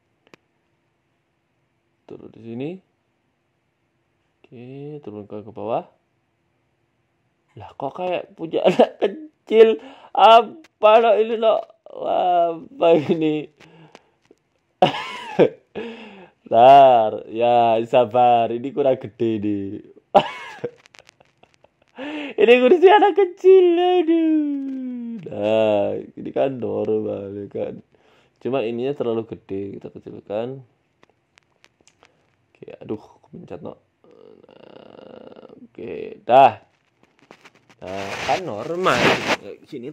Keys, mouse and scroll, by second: 0.2 KP_7, 0.6 scroll up 2, 0.8 shift+middle click, 1.1 Tab, 1.7 g, 3.0 middle click, 3.3 z, 3.6 click, 4.1 middle click, 4.8 middle click, 5.1 click, 5.8 g, 6.9 middle click, 7.9 Tab, 8.1 middle click, 8.4 scroll down 4, 8.8 shift+right click, 10.3 KP_7, 11.0 z, 12.2 g, 13.6 KP_0, 14.2-14.7 scroll up 13, 14.7 shift+middle click, 15.5 g, 17.1 z, 17.5 z, 18.1-18.4 scroll down 4, 18.4 a, 18.6 a, 18.8 middle click, 19.4-20.0 scroll up 9, 19.8 middle click, 20.3 middle click, 20.9 right click, 21.2 shift+right click, 22.2 s, 23.2 KP_1, 23.8 KP_3, 24.6 g, 26.3 KP_0, 27.7 s, 28.4 right click, 28.9 Tab, 29.4 s, 30.5 s, 31.6 KP_8, 31.6 KP_7, 32.2 z, 32.5 click, 33.4 g, 34.8 z, 36.0 KP_0, 36.7 a, 36.8 a, 37.2 Tab, 37.9 a, 38.1 a, 38.5-38.9 scroll down 2, 39.3-39.7 scroll down 1, 39.7 middle click.